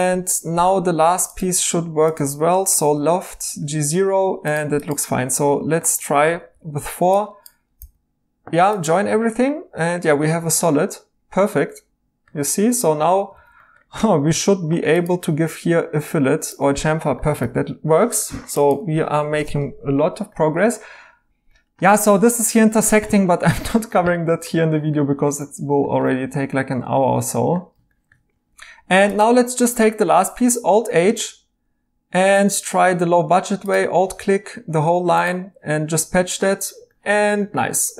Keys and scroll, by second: 0.5 e, 2.8 i, 3.3 Tab, 6.5 4, 7.8 j, 10.4 e, 12.8-13.3 typing, 17.4 ctrl+z, 18.9 alt+h, 28.7 Tab, 30.4 h, 32.3 2.